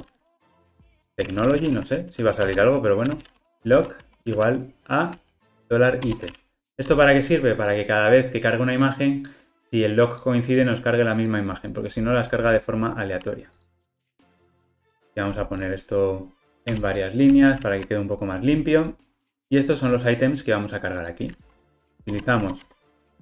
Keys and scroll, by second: 16.4 alt+Return, 21.6 Tab.